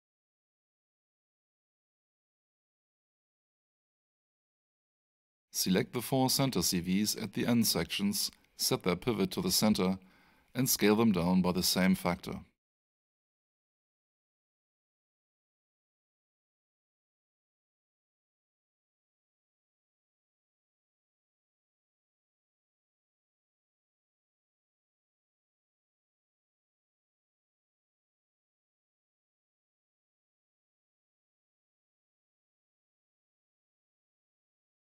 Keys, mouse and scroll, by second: 3.3 alt+shift+middle click, 4.2 click, 9.9 alt+click, 14.3-15.8 typing, 16.1 Return, 17.6 click, 30.7-32.0 typing, 32.4 Return.